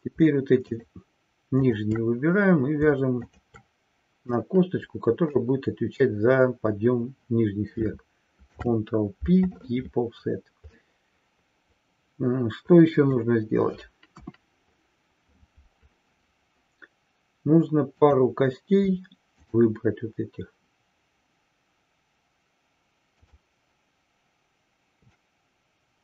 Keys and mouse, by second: 0.9 shift+drag, 3.4-3.8 shift+drag, 4.5-5.6 middle drag, 8.4 ctrl+p, 11.0-13.4 middle drag, 14.1 KP_1, 19.5-19.9 shift+drag.